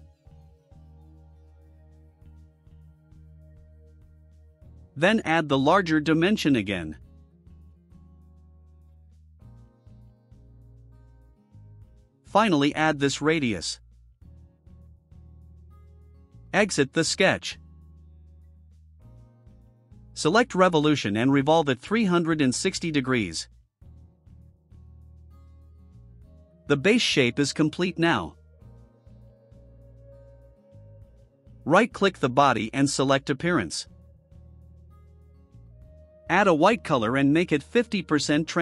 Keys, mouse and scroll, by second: 0.9 click, 1.7 1, 2.1 0, 2.4 Return, 3.3 scroll down 2, 4.4 right click, 5.1 click, 5.3 scroll down 2, 6.6 ctrl+click, 7.2 click, 8.2 click, 8.5-9.8 typing, 10.9 middle click, 12.0 click, 12.7 click, 13.1-14.4 typing, 16.6 click, 17.6-18.0 scroll down 2, 18.1 right click, 18.7 scroll up 1, 21.0 click, 22.0 middle drag, 22.0 scroll down 1, 22.2 right click, 23.0 middle click, 24.1 click, 26.8-27.3 drag, 28.3 click, 28.8 click, 29.7-31.2 drag, 32.4 right click, 34.5 click, 36.2 click, 37.6 click, 38.2 click.